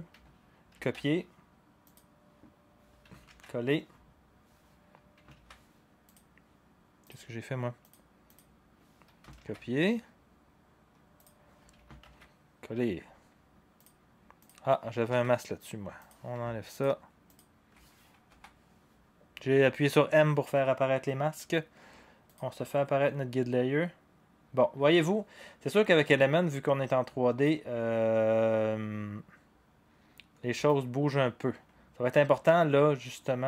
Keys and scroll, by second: 0.7 ctrl+c, 3.3 ctrl+v, 5.3 ctrl+z, 9.4 ctrl+c, 12.0 ctrl+v, 15.2 m, 18.3 Delete.